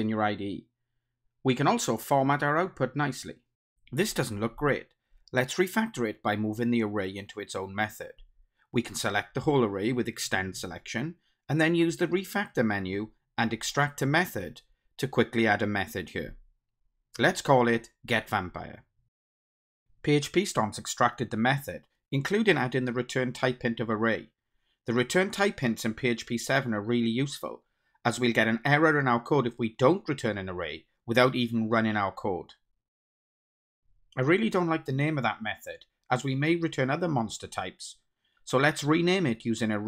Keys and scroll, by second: 4.8 ctrl+shift+super+F12, 11.5 alt+Up, 14.8 ctrl+alt+t.